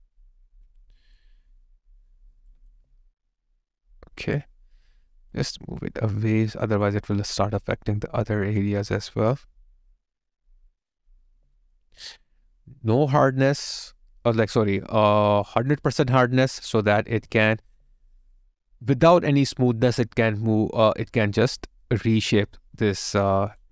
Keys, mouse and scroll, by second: 2.7 alt+click, 11.3 alt+right click, 11.7 alt+click, 17.7 alt+right click.